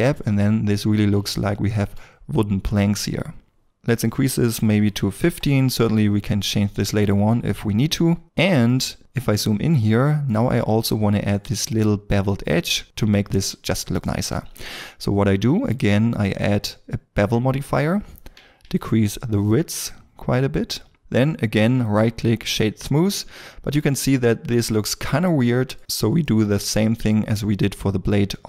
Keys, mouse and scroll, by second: 0.5-1.4 scroll down 1, 1.4 shift+middle click, 3.7-4.8 scroll up 1, 4.8 1, 5.0 5, 5.3 Return, 7.5 shift+middle click, 8.7 middle click, 9.0 scroll up 1, 10.0 shift+middle click, 10.5 middle click, 18.8 shift+l, 21.9 right click, 23.1 scroll down 1, 23.8 middle click, 25.9 scroll down 1, 26.2 middle click, 27.1 scroll, 27.3-28.4 scroll up 1.